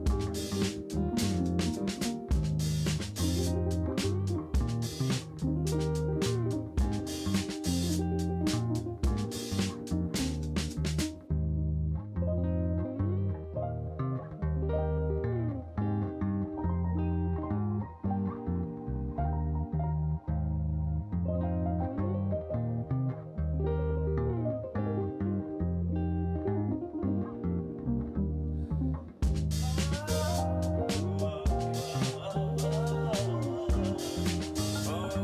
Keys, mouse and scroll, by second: 0.4 click, 1.4 click, 2.8 ctrl+3, 3.2 right click, 3.9 Tab, 4.5 KP_1, 5.4 ctrl+r, 6.9 ctrl+r, 9.1 shift+middle click, 9.9 ctrl+r, 11.9 click, 12.3 shift+middle click, 13.3 ctrl+r, 17.2 KP_Decimal, 17.9 middle click, 18.4 ctrl+r, 19.3 middle click, 19.6 ctrl+r, 20.5 ctrl+r, 21.6 ctrl+b, 23.6 Tab, 24.0-24.6 drag, 24.8 drag, 25.5 Tab, 25.7 middle click, 26.4 3, 26.9 click, 27.4 z, 28.0 middle click, 28.8 middle click, 29.3 click, 29.3 middle click, 31.0 ctrl+KP_Add, 31.5 g, 32.9 z, 33.5 Tab, 34.0 middle drag, 34.6 middle drag.